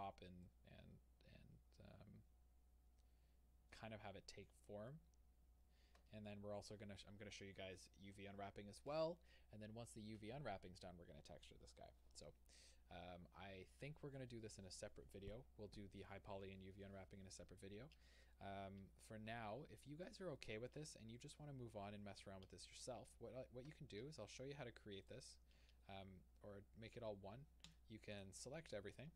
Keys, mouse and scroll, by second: 4.0 scroll down 1, 17.7-18.4 scroll down 2, 21.2 click, 22.2 h, 23.1-25.0 scroll down 1, 25.0 click, 27.7 c.